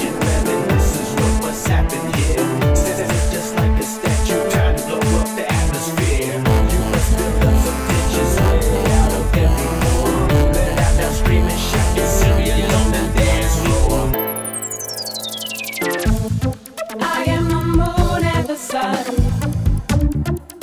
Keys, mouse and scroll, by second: 0.2-1.4 typing, 1.6 Return, 3.5 click, 4.5 typing, 11.7 click, 11.9 middle click, 13.3 click, 14.7-16.0 drag, 16.9 click, 17.5 click, 18.3 click.